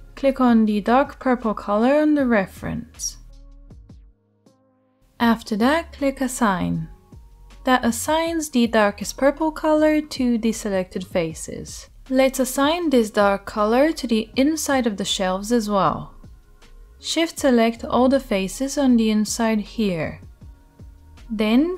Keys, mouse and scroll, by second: 6.7-16.5 middle drag, 16.5-18.4 right drag, 18.4 shift+middle click, 18.5 shift+right click, 19.1 shift+middle click, 19.2-21.7 shift+right drag.